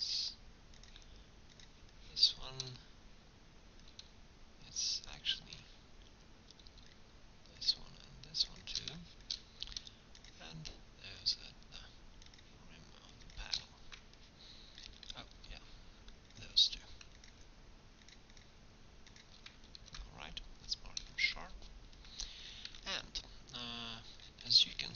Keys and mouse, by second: 7.6-9.7 drag, 17.7-19.8 drag, 19.8 ctrl+e, 20.8 click, 22.7 Tab.